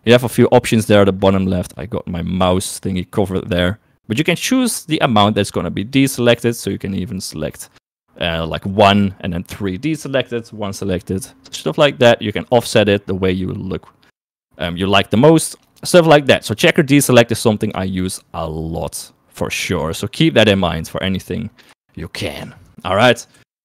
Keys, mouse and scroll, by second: 5.9 click, 6.3 click, 12.7-15.8 drag, 21.9 shift+middle click, 22.5 Tab, 23.5 Delete.